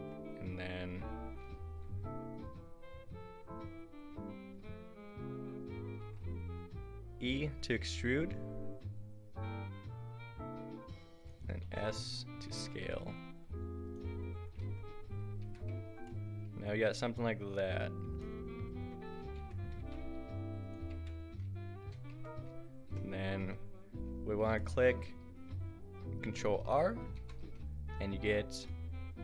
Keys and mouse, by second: 6.1 e, 11.7 s, 14.8 click, 15.4 Tab, 19.4 Tab, 19.8 g, 20.9 Tab, 22.1 Tab, 27.2 ctrl+r.